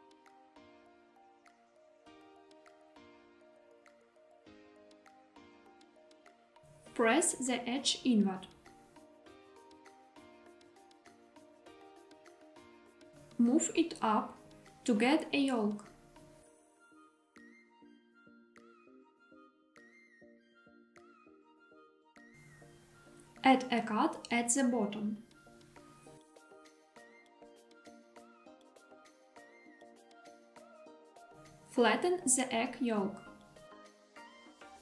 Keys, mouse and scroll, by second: 3.9 click, 5.3 3, 6.2 click, 8.8 i, 12.3 click, 13.3 e, 14.9 z, 20.8 click, 22.0 scroll up 2, 22.9 ctrl+r, 27.5 click, 29.9 3, 30.4 click, 31.3 g, 31.9 z.